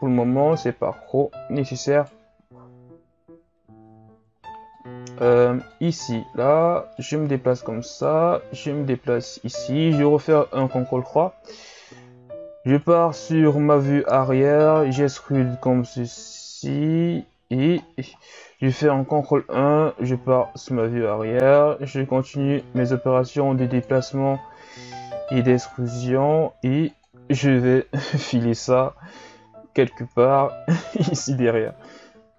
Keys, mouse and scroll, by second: 2.7 KP_1, 4.7-6.1 drag, 6.1-6.9 ctrl+scroll down 5, 6.9 right click, 8.5 right click, 10.5 ctrl+KP_3, 11.6-12.8 ctrl+scroll down 12, 12.8 right click, 13.4-14.7 scroll down 4, 14.7 e, 17.8-18.9 scroll down 1, 18.9 ctrl+KP_1, 20.1-20.9 scroll down 4, 20.9-22.6 scroll up 3, 22.6-24.3 drag, 24.3 e, 26.0 e, 29.7 KP_3, 30.2 ctrl+KP_3, 31.8 right click.